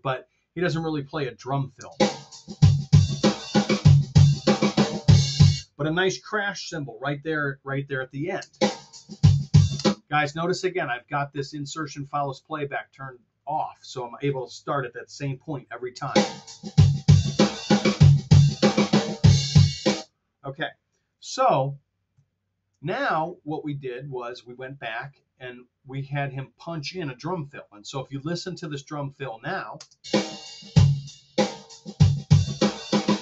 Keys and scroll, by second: 1.8 space, 5.4 space, 8.4 space, 9.7 space, 15.9 space, 19.9 space, 21.5 super+z, 27.2 t, 29.8 BackSpace.